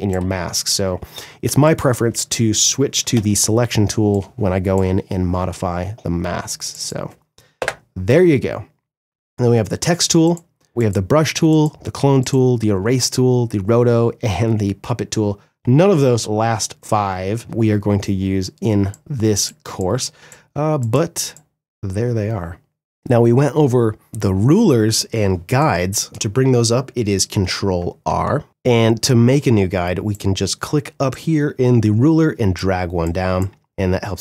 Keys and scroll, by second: 1.0 space, 2.6 v, 7.1 Delete, 18.3 space, 24.6 space, 26.5 ctrl+r, 27.2 ctrl+r.